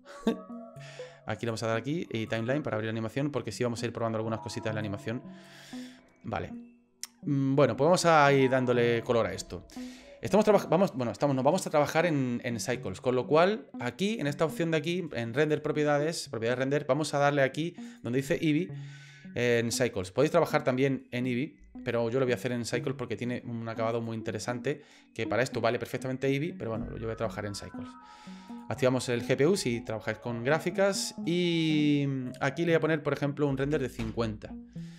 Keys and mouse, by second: 1.6 click, 4.8 click, 5.8-9.0 drag, 15.4 click, 18.0-19.6 drag, 23.9-28.6 drag, 32.3-34.5 drag.